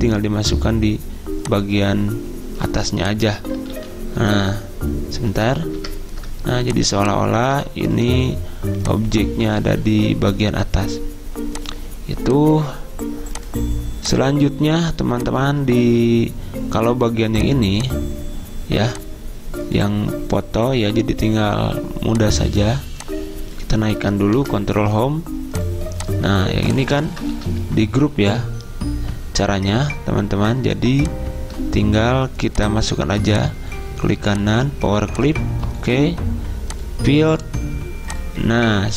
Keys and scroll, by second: 3.8 ctrl+z, 4.4 ctrl+z, 5.9 ctrl+Home, 24.5 ctrl+Home, 27.4 ctrl+z, 31.5 ctrl+z.